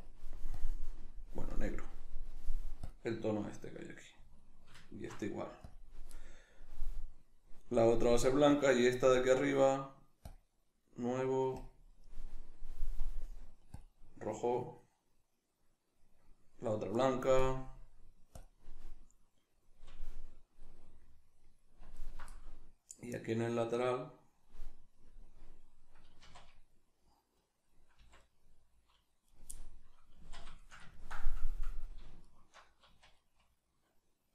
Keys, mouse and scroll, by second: 4.4 alt+right click, 4.7 alt+shift+right click, 5.7 click, 17.4-20.8 drag, 20.8-21.9 middle drag, 21.9 alt+right click, 22.4-29.3 middle drag, 26.2 z, 28.0 c, 29.3 right click, 29.5-32.2 middle drag, 30.1 z, 32.2 alt+shift+right click, 32.9 z, 33.1-34.3 middle drag.